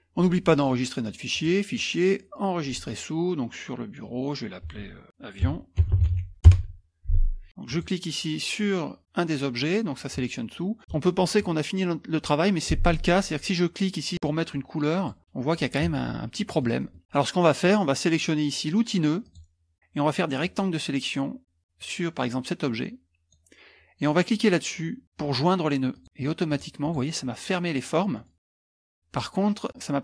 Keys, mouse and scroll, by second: 1.3 click, 2.6 click, 5.2-6.6 typing, 7.7 click, 15.0 click, 15.5 middle click, 15.5-17.0 scroll down 3, 15.9 middle click, 19.2-23.7 drag, 25.9 click, 26.5 click, 28.1 scroll up 1, 28.3 middle click, 28.5 scroll down 1.